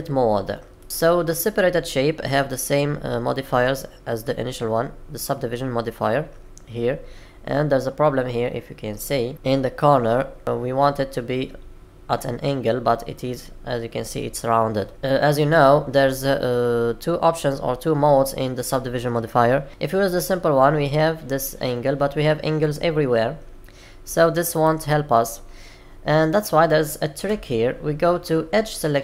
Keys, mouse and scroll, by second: 0.7 middle click, 7.3-9.3 scroll up 4, 9.3 shift+middle click, 14.9-15.4 scroll down 2, 19.7 click, 24.5 click.